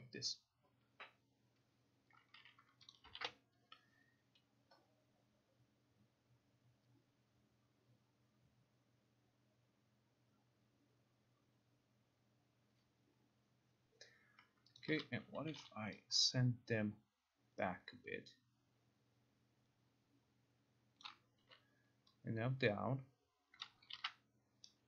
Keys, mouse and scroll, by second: 3.0 click, 3.2 ctrl+r, 14.8 click, 15.6 t, 21.1 click, 21.5 e, 23.7 click, 24.0 ctrl+r.